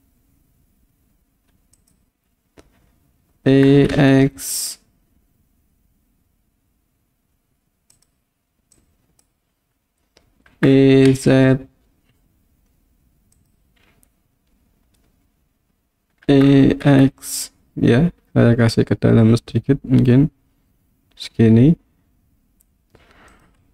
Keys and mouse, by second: 1.8 click, 3.5 e, 3.9 x, 7.9 click, 8.9 click, 10.5 e, 11.1 z, 13.4 click, 16.3 e, 16.9 x, 23.3 click.